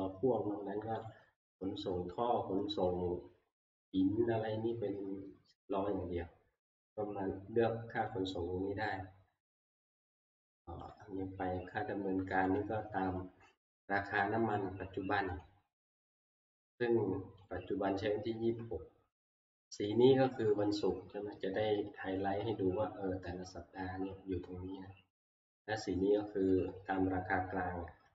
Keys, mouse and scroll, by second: 1.1 click, 2.0 scroll down 1, 3.4 scroll down 2, 3.9 scroll, 4.5 scroll, 6.6 scroll down 4, 7.1 scroll up 1, 8.1 click, 9.7 scroll, 10.9 click, 10.9 scroll, 12.6 click, 15.4 click, 17.5 click, 26.7 click.